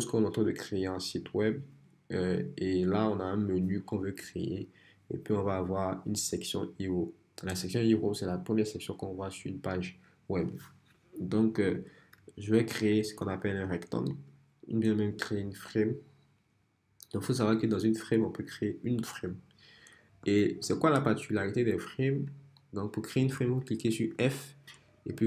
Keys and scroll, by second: 20.2 f.